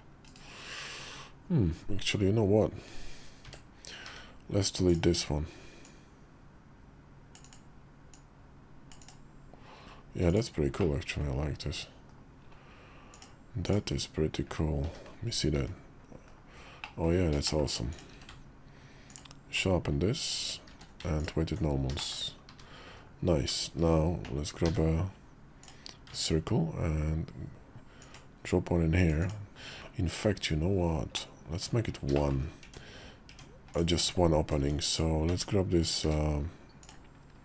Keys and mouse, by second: 3.2 d, 3.8 d, 5.6-7.4 drag, 7.9-8.9 drag, 10.1 click, 10.6 middle click, 11.3 KP_5, 11.8 KP_5, 12.9 click, 13.4 click, 14.6 h, 15.3 `, 16.1 KP_5, 16.6 click, 16.8 middle click, 17.2 shift+click, 17.9 q, 20.5 q, 21.7 shift+click, 22.7 KP_5, 24.4 d, 27.8-29.5 ctrl+drag, 29.5 q, 30.0 KP_5, 30.9 middle click, 31.9 shift+middle click, 32.4 Tab, 33.1 Tab, 33.7 Tab, 34.4 Tab, 34.6 click, 35.1 Tab, 35.6 click, 35.8 q.